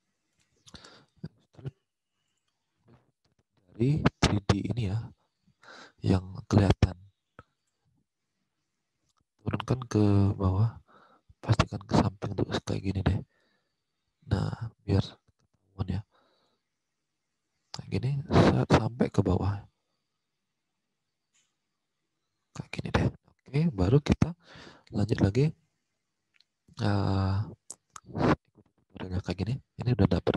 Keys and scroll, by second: 23.4 alt+Tab.